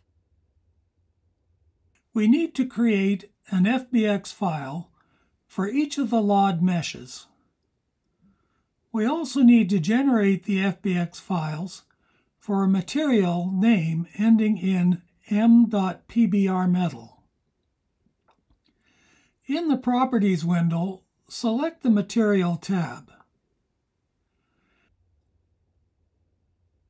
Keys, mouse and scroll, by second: 21.4-21.7 scroll down 3, 26.4 click.